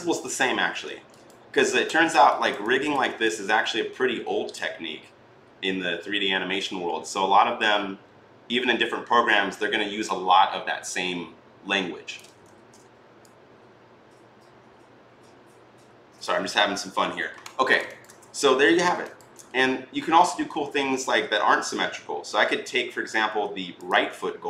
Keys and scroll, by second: 12.3 ctrl+z, 16.4 ctrl+z.